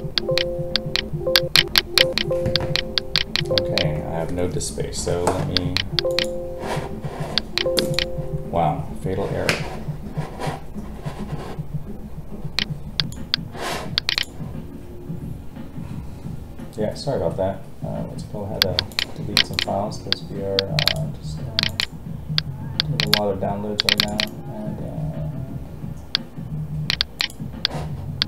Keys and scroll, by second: 2.4 Escape.